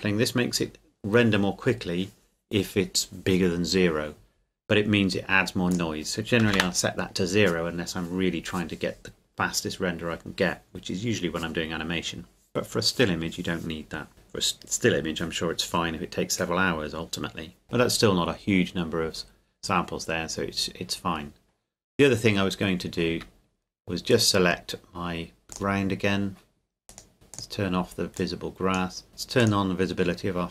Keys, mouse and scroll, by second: 5.7 click, 6.4 KP_0, 6.6 KP_Enter, 23.1 Escape, 24.1 right click, 25.5 click, 26.9 right click, 27.3 click.